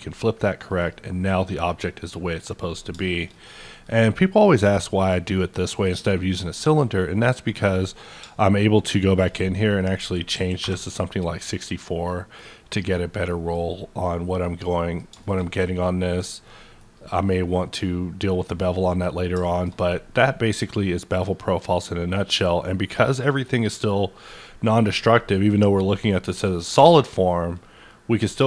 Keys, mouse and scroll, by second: 0.6 click, 0.6 f, 1.3-3.5 middle drag, 3.5-5.2 shift+middle drag, 5.2-8.1 middle drag, 5.9-7.7 scroll up 1, 8.2 middle click, 8.2 scroll up 1, 8.7-10.3 shift+drag, 10.0 KP_6, 10.3 KP_4, 10.6 KP_Enter, 12.0 middle click, 13.2 middle click, 14.6-16.4 middle drag, 16.4 middle click, 16.9-18.3 scroll up 2, 18.3 scroll down 1, 18.5 middle click, 19.0 scroll down 1, 19.7-20.7 scroll down 1, 20.7 middle click, 21.0-21.3 scroll down 1, 26.7 middle click, 26.7 scroll down 1, 26.7 q, 27.5 click.